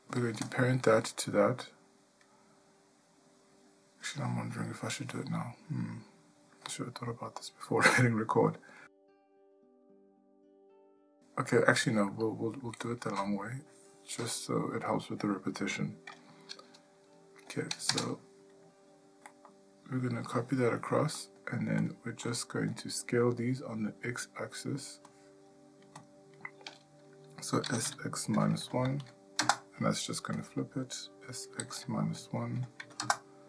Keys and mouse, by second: 0.4 click, 12.2 shift+middle click, 13.5 click, 17.9 shift+d, 25.1 click.